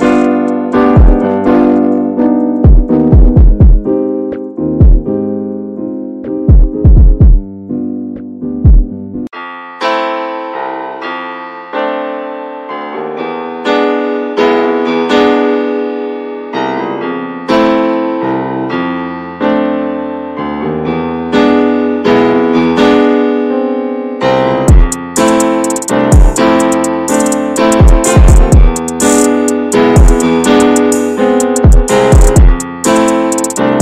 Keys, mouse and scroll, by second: 0.0 shift+middle click, 0.2 scroll up 1, 0.4-0.9 middle drag, 0.9 Tab, 1.2 click, 1.7 middle click, 1.8 scroll up 1, 3.0 3, 3.1 click, 3.5 alt+middle click, 4.0 scroll down 3, 4.2 shift+middle click, 4.9 shift+d, 5.7 shift+middle click, 5.8-6.9 scroll up 2, 6.9 e, 8.6 middle click, 9.1 click, 9.4 middle click, 10.0 alt+middle click, 10.9 e, 12.0-12.4 scroll down 1, 12.4 alt+z, 12.6 middle click, 12.7-13.5 scroll up 2, 14.4 x, 15.4 middle click, 15.8 alt+z, 16.0 click, 16.3 alt+middle click, 17.3 l, 18.0 click, 20.3 middle click, 20.8 click, 21.0-22.2 alt+middle drag, 22.2 click, 23.0 alt+middle click, 23.7 click, 25.4 Tab, 25.5 click, 25.7 scroll down 3, 25.9 middle drag, 26.2 ctrl+s, 26.4-27.6 shift+middle drag, 27.6 scroll up 1, 27.9-28.3 middle drag, 28.3 ctrl+s, 28.5 click, 28.9-29.6 middle drag, 29.6 scroll up 2, 29.8-31.1 middle drag, 31.1 Tab, 31.3 click, 31.5 middle click, 31.6-32.7 scroll up 3, 31.9 shift+middle click, 32.7 3, 33.1 click.